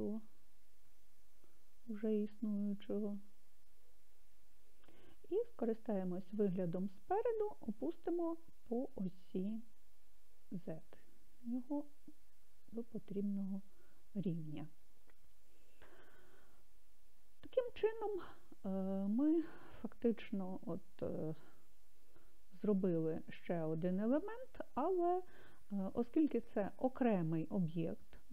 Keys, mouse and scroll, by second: 4.0 click, 6.3 KP_1, 10.4 g, 11.1 z, 13.6 click, 21.3-28.3 middle drag.